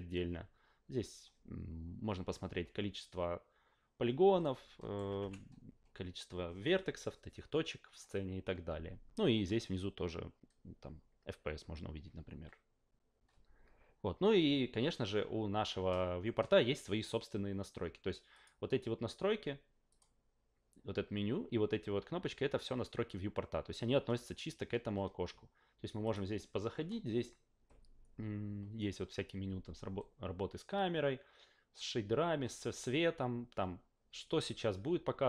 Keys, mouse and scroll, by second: 4.4-4.9 alt+right drag, 5.2 f, 18.3 click, 19.9 click, 26.0 click.